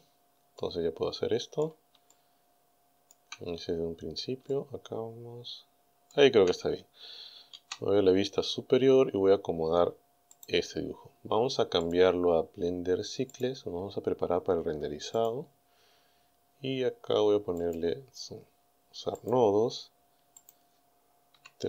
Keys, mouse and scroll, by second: 0.6-1.9 middle drag, 2.1 shift+middle click, 2.1 shift+scroll up 2, 3.2 shift+scroll down 2, 3.6-3.9 shift+scroll up 3, 4.5-6.3 shift+middle drag, 7.6 KP_7, 8.7-9.4 scroll down 4, 10.4 right click, 11.9 click, 13.4 click, 15.2 click, 17.6 click, 19.2 click, 20.4 click.